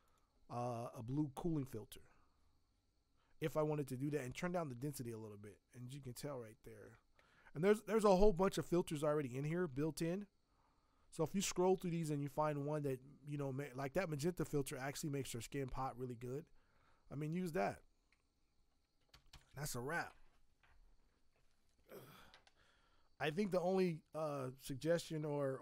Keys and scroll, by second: 23.3 v.